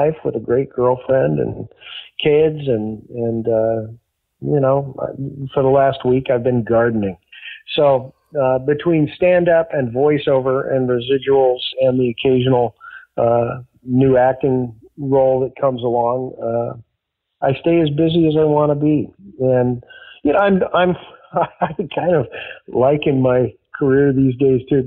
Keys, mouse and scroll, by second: 9.6-11.2 drag, 11.6 click, 12.5 click, 13.4-14.7 drag, 15.8 click, 16.9 ctrl+s, 18.8-19.8 drag, 20.9 click.